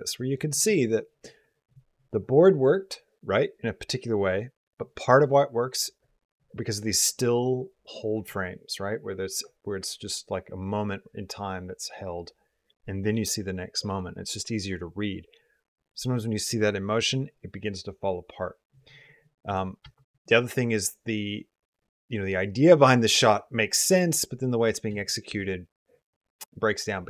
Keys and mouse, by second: 19.3 click, 19.7 space, 24.7 space.